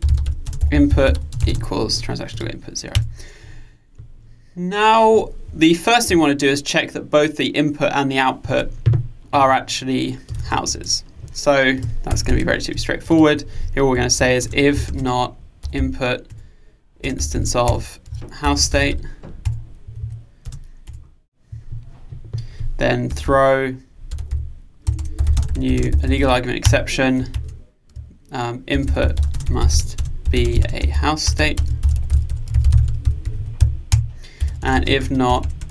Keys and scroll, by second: 10.4 super+c, 12.3 super+v, 16.4 Return, 26.7 Return.